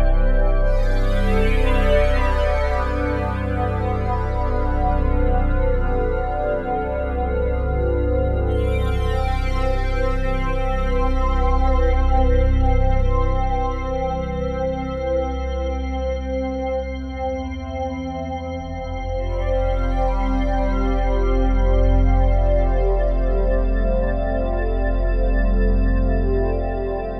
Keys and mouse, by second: 0.4 ctrl+alt+click, 0.8 ctrl+alt+click, 1.5 click, 1.8 click, 2.9 Delete, 3.7 click, 4.5 ctrl+s, 5.1 alt+click, 7.4 click, 8.7 click, 9.4 Delete, 10.0 click, 10.2 Delete, 10.6 click, 15.1 click, 16.7 click, 18.2 click, 20.9 click, 22.2 click, 24.1 ctrl+s, 24.5 click, 25.8 click.